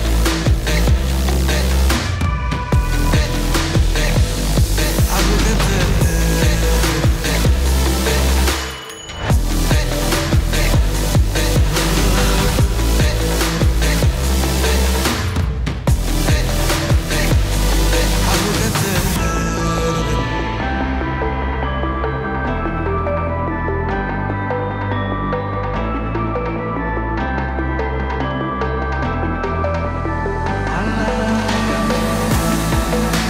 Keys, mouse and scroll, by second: 6.9 ctrl+space, 7.7-8.5 typing, 9.2 Return, 11.6 scroll up 1, 12.2-12.9 middle click, 14.2 click, 19.7 click, 22.2 2, 22.4 Return, 24.7 click, 27.7-29.3 drag.